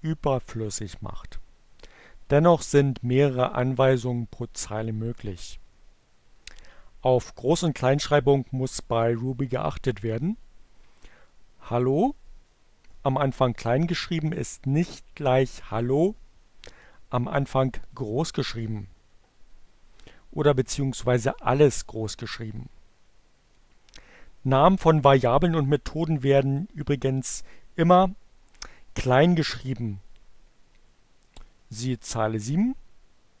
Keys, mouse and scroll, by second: 2.0-3.8 drag, 11.4-12.4 drag, 15.0-16.4 drag, 17.6 click, 20.6-22.0 drag, 22.5-23.5 drag, 31.0 click.